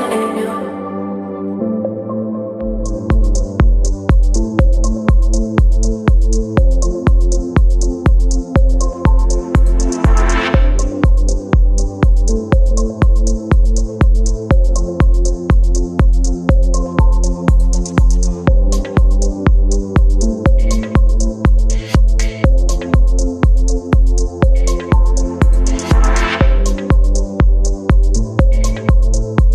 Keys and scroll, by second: 14.8 space, 15.8 ctrl+t, 19.3 space.